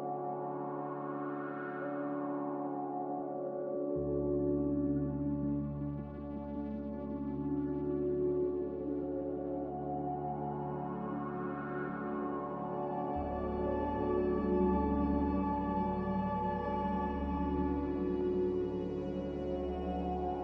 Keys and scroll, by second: 8.5 b, 17.3 ctrl+z.